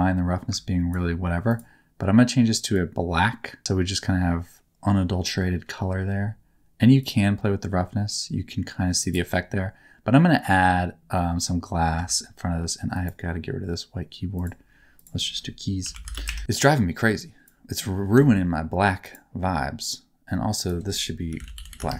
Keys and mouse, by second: 1.5 click, 3.6-5.4 middle drag, 7.0-9.0 drag, 10.2 middle click, 11.2 middle click, 11.9 Tab, 12.9 click, 14.9-16.2 drag, 19.8 click, 20.6-21.8 drag.